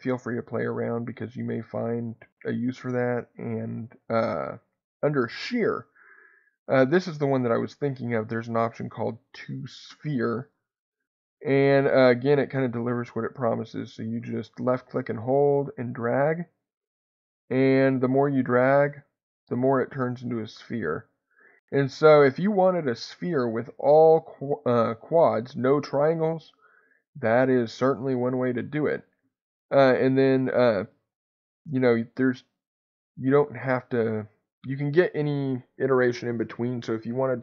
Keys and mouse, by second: 5.2-10.6 drag, 14.6-21.9 drag, 23.2-28.5 middle drag, 32.3-37.4 drag.